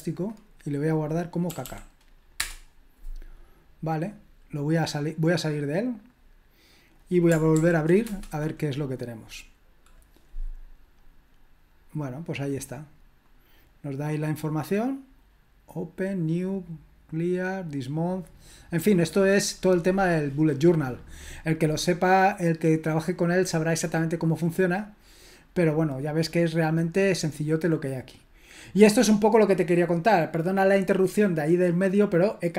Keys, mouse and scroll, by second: 1.5 typing, 2.3 Return, 5.9 click, 6.7 click, 7.5 ctrl+p, 8.0 Return, 13.2-32.5 drag.